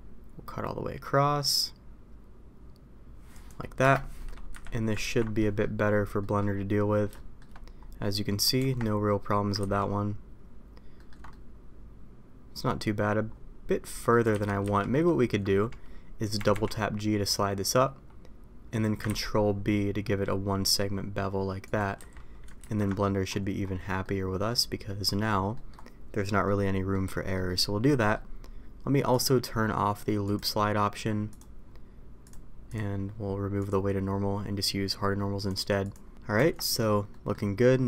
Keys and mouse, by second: 4.1 middle click, 4.5 a, 5.0 ctrl+t, 5.4 middle click, 6.2 middle drag, 7.1 shift+middle drag, 8.5 Tab, 9.9 ctrl+z, 10.9 ctrl+middle click, 11.3-12.6 middle drag, 13.8 middle drag, 14.3 ctrl+z, 16.3 g, 19.0 ctrl+b, 21.9 a, 22.6 ctrl+t, 24.0 middle click, 25.5 middle click, 26.4 middle click, 27.3 middle click, 27.9 middle click, 29.2 click, 30.2 click, 31.3 click, 32.2-32.7 drag, 33.6 click, 35.4 click, 35.9 click, 36.3 Tab, 37.1 middle drag.